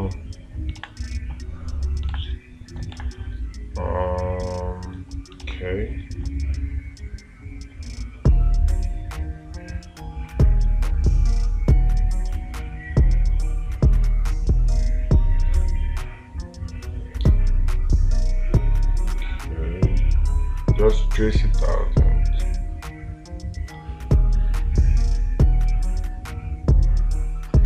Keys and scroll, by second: 1.2 space, 2.6 space, 5.9 space.